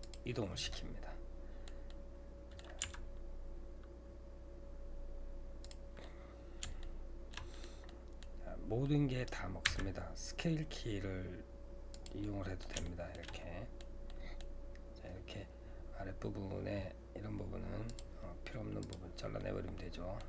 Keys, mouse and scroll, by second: 0.8-2.9 middle drag, 2.9 g, 6.0-8.3 middle drag, 8.3-8.8 scroll up 2, 8.8 middle click, 9.7 s, 12.2-17.9 middle drag, 17.9-19.4 drag, 19.4-20.2 middle drag.